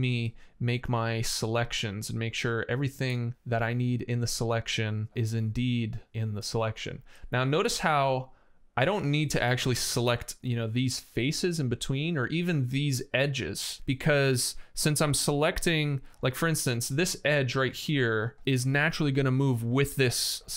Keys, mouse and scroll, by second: 7.0 click.